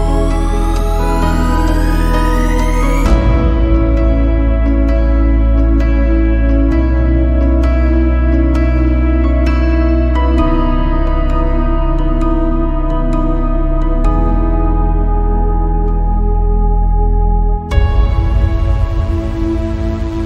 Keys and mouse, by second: 6.0 click, 7.1 click, 8.6-9.7 drag, 10.4 click, 11.9-14.2 middle drag, 15.1-17.0 drag.